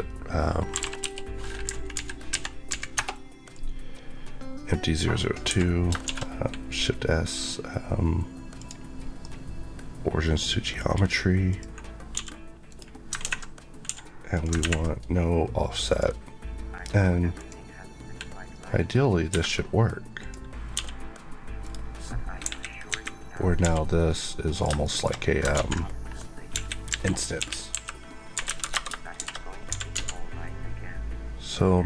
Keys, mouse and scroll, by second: 0.6 typing, 1.6 Down, 2.9 Return, 5.4 Escape, 6.0 shift+s, 8.5 click, 9.1 middle click, 11.4 click, 12.0 click, 12.1 g, 12.6 right click, 13.8 Escape, 14.2 click, 15.8 click, 17.3 click, 19.2 Escape, 20.1 click, 20.7 g, 21.5 right click, 22.3 KP_1, 22.8 KP_3, 23.5 g, 24.4 click, 24.8 shift+middle click, 25.0 shift+scroll up 2, 25.5 ctrl+z, 26.4-29.8 typing, 28.6 KP_Enter.